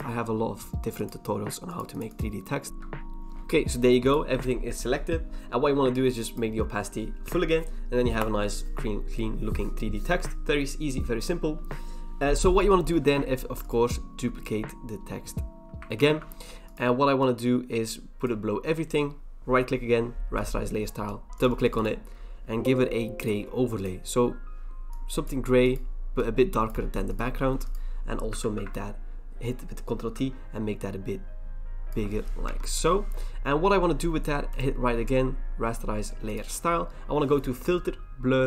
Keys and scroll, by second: 16.0 ctrl+j, 28.4 ctrl+t, 32.4 Return.